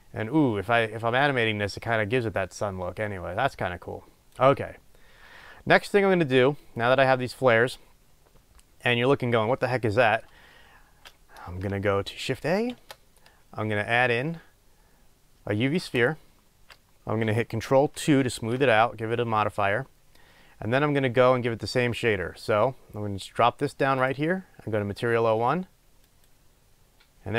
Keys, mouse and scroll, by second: 5.9-24.4 middle drag, 16.1 shift+a, 18.4 ctrl+2, 24.4-27.3 drag.